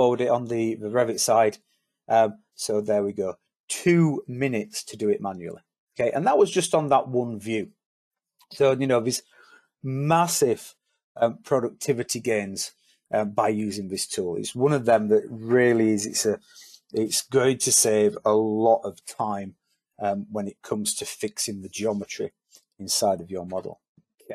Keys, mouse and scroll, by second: 23.8-24.3 typing.